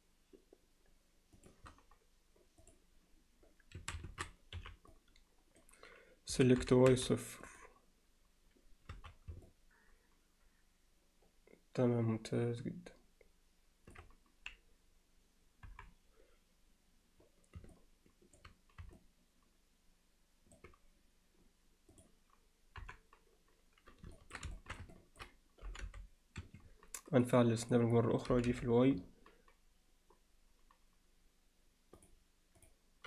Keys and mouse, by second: 2.6 click, 3.8 a, 4.6 b, 6.3 s, 9.5-14.0 alt+middle drag, 15.7 KP_7, 17.7 middle click, 19.0-20.6 alt+middle drag, 21.9 click, 22.8 KP_7, 24.2 ctrl+alt+middle click, 24.6 alt+shift+middle click, 24.9 ctrl+alt+middle click, 25.7 g, 27.2 click, 27.6 click, 28.3 g.